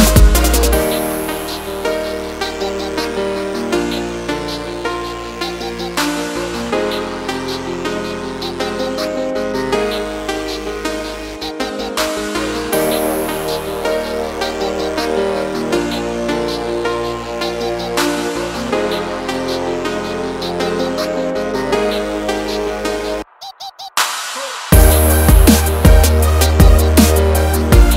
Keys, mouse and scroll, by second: 3.1-3.5 scroll down 1, 4.4 click, 5.6 click, 8.3 click, 10.5 F4, 11.6 click, 12.2 ctrl+o, 13.6 scroll down 1, 18.0 scroll down 1, 19.1 click, 21.7 click, 24.1 click, 25.3 F4, 26.3 click, 27.4 ctrl+click.